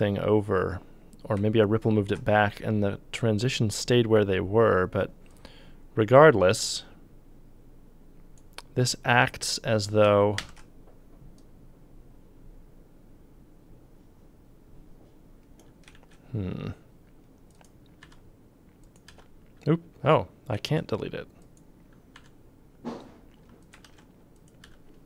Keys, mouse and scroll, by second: 10.4 ctrl+d, 15.9 ctrl+z, 17.6 click, 18.0 c, 19.1 c, 20.8 ctrl+z, 22.2 c, 23.7 ctrl+click, 23.8 ctrl+d, 24.6 c.